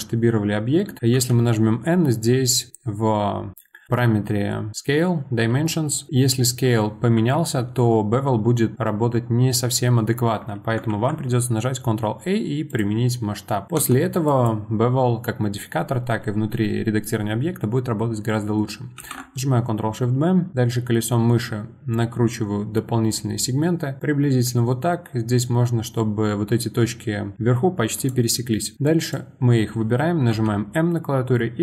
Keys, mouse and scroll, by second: 1.1 n, 3.6-6.1 middle drag, 6.1 s, 10.9 ctrl+a, 13.4 middle click, 13.7 Tab, 14.2 click, 19.0 ctrl+shift+b, 28.5-28.8 scroll up 2, 28.8 click, 30.3 m.